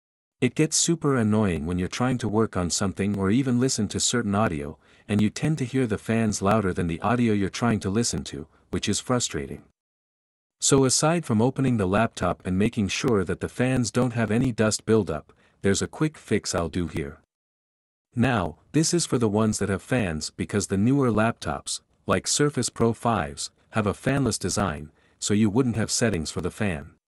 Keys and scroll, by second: 0.7 shift+7.